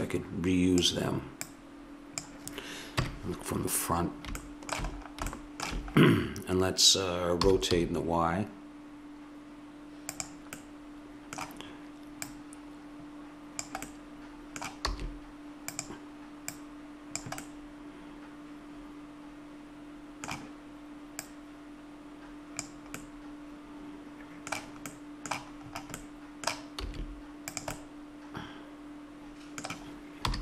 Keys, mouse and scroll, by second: 3.0 KP_1, 7.4 r, 8.0-10.0 middle drag, 11.0-12.3 middle drag, 12.3-14.1 drag, 13.9-14.9 middle drag, 14.9 s, 16.5 click, 17.4 click, 21.2-23.0 drag, 23.0-24.1 middle drag, 25.1 middle click, 26.9 s, 30.2 r.